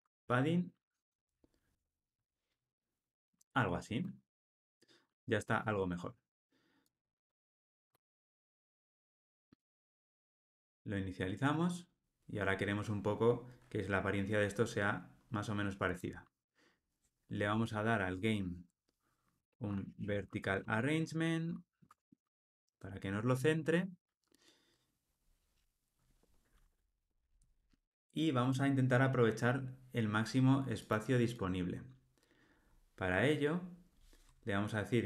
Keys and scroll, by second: 1.7 Tab, 20.6 Return, 21.8 Tab.